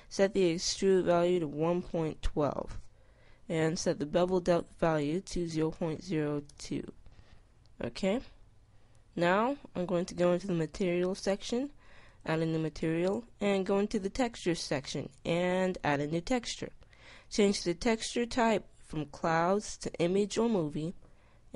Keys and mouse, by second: 0.9-3.7 middle drag, 5.7-7.0 middle drag, 7.4-10.0 middle drag, 14.8 click, 16.9-18.5 drag, 20.2 click, 21.5 middle click.